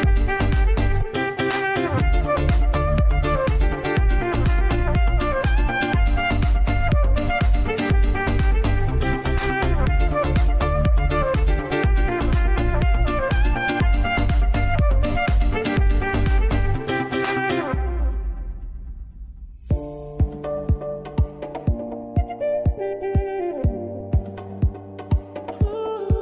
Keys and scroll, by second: 3.4 ctrl+space, 9.6 ctrl+space, 15.4 ctrl+space.